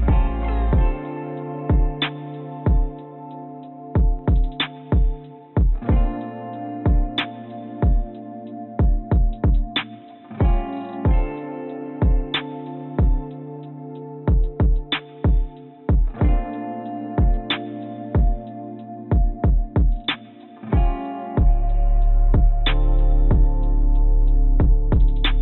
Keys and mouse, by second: 1.8-4.5 drag, 5.7-9.4 drag, 11.6 click, 14.2-16.3 drag, 16.7 click, 17.8-19.0 drag, 19.7 click, 22.0 ctrl+b, 23.1 click, 24.4 ctrl+b.